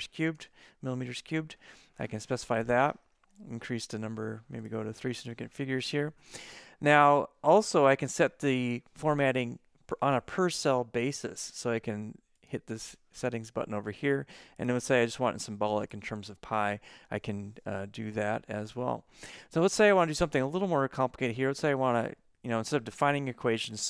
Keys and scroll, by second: 0.0-0.4 typing.